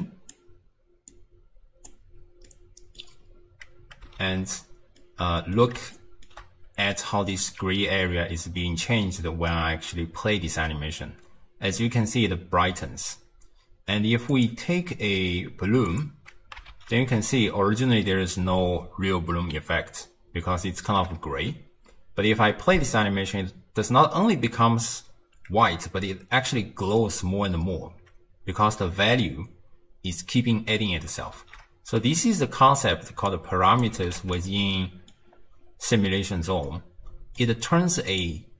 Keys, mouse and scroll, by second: 1.1 click, 2.5 middle click, 3.3-4.2 scroll down 2, 4.2 shift+space, 5.0-9.0 middle drag, 10.0 space, 12.7 space, 14.3 click, 15.9 click, 16.7 shift+space, 23.2 space, 25.4 space, 26.4-29.4 middle drag, 31.4 shift+space, 32.0 middle click, 32.6-33.3 scroll down 1, 33.3 click, 34.0 g, 34.7 middle click, 35.3-36.7 scroll up 4, 36.7-38.1 middle drag, 38.1 click.